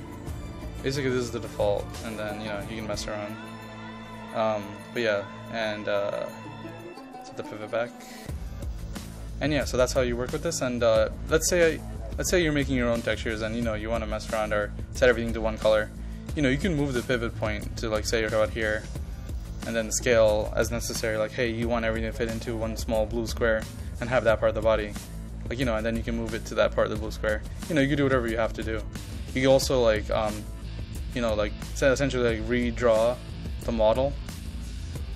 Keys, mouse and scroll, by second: 8.8-19.5 drag, 21.1-22.6 typing, 22.2 click, 23.3 click, 23.8 KP_0, 24.1 KP_Decimal, 24.3 KP_5, 24.9-35.1 drag.